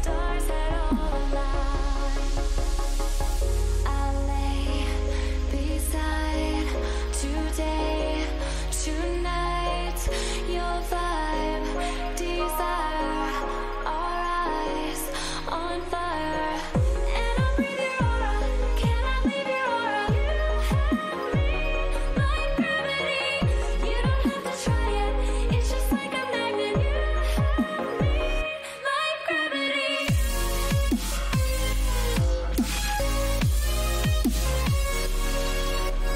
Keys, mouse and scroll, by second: 4.5 a, 5.6 b, 7.2 e, 12.9-14.0 drag, 14.0 a, 15.2 b, 16.5 g, 25.2 a.